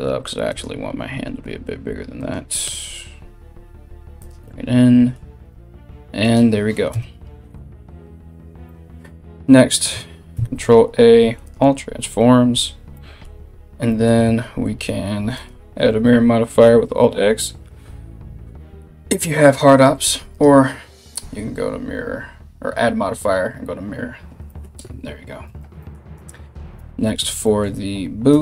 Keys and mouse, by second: 0.7 r, 2.2 g, 5.0 g, 6.5 KP_1, 9.9 ctrl+a, 13.8 alt+x, 14.9 click, 15.1-20.0 middle drag, 20.0-28.4 drag, 25.0 a, 25.2 a, 25.7 middle click, 25.7 right click, 26.3 KP_1, 27.9 middle click, 27.9 right click.